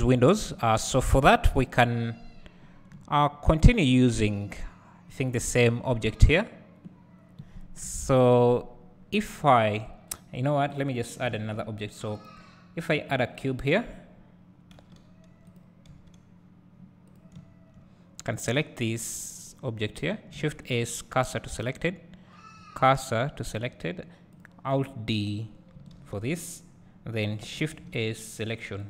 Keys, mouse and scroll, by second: 1.0-1.6 scroll down 1, 1.6 KP_1, 3.2 `, 5.3 click, 7.8 KP_1, 9.1 scroll up 1, 10.8 click, 13.2-18.6 drag, 15.1 g, 16.0 s, 17.6 `, 24.5 click, 26.0 alt+d.